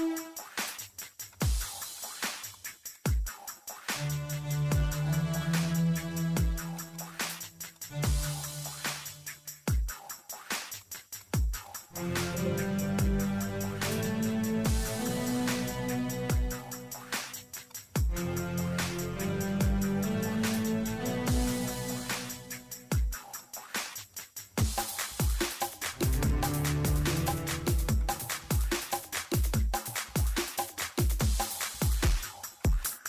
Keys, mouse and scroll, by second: 0.6 click, 3.4 middle click, 4.6 middle click, 4.9 click, 5.1 middle click, 5.6 click, 7.5 click, 8.4 click, 8.5 middle click, 10.8 click, 12.3 ctrl+z, 12.6 click, 12.8 scroll down 1, 13.5 ctrl+z, 14.1 scroll up 1, 14.2-14.8 scroll down 2, 14.4 click, 15.1 click, 16.9 middle click, 17.5 click, 17.7 middle click, 18.0 scroll up 1, 18.4 middle click, 18.6 scroll up 1, 18.8 middle click, 20.1 scroll down 1, 20.5 middle click, 21.0 click, 21.6 Delete, 21.9 click, 23.9 click, 24.6 middle click, 25.0 click, 25.1 middle click, 25.4 click, 26.0 middle click, 26.3 click, 26.4 middle click, 26.6 click, 26.7 middle click, 26.9 click, 28.1 click, 28.1 scroll down 1, 28.3 click, 29.0 Delete, 29.2 click, 29.6 Delete, 29.8 click, 30.4 middle click, 30.8 click, 30.9 middle click, 31.4 click, 32.3 middle click, 32.9 middle click.